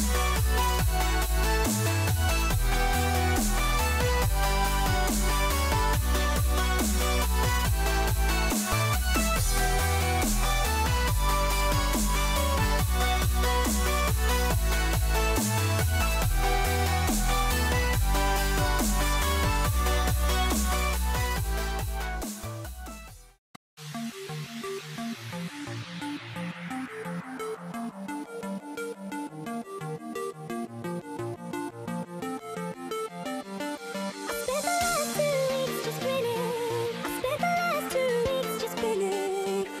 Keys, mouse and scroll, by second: 21.3 ctrl+r, 33.8 c.